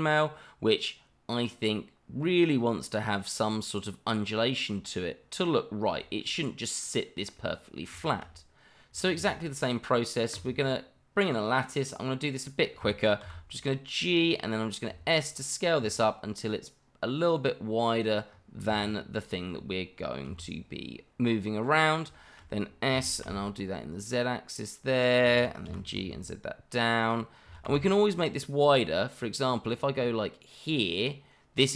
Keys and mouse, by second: 2.2-2.8 middle drag, 4.5-5.5 middle drag, 6.0 shift+middle drag, 6.4-6.8 middle drag, 7.3-7.8 middle drag, 8.0 shift+middle drag, 9.1 shift+a, 11.8 click, 13.2 g, 14.2 click, 14.9 s, 17.9 click, 18.8-19.1 shift+middle drag, 20.3 g, 22.3 shift+middle click, 22.9 s, 23.2 z, 25.2 click, 25.6 g, 26.0 z, 27.5 s, 27.6 z.